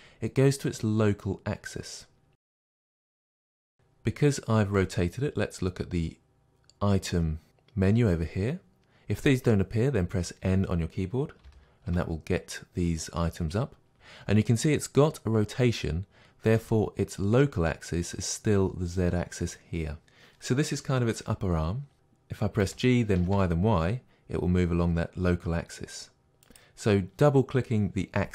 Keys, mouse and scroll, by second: 3.7 click, 11.5 n, 22.0 click, 22.6 g, 26.6 click.